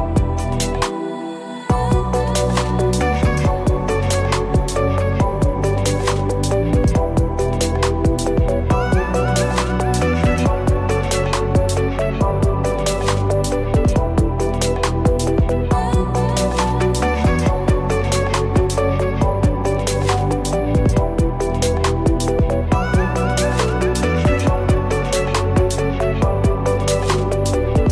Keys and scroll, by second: 25.1 ctrl+-, 27.0 ctrl+=.